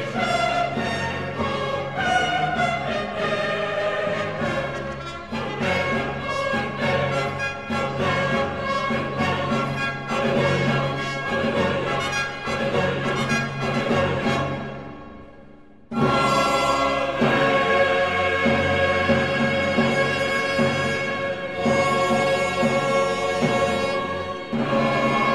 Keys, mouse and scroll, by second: 1.4-1.7 typing, 5.6 click, 8.7 middle click, 8.8-17.1 middle drag, 17.1-19.0 middle drag, 19.0 ctrl+r, 22.0 click, 23.6 right click.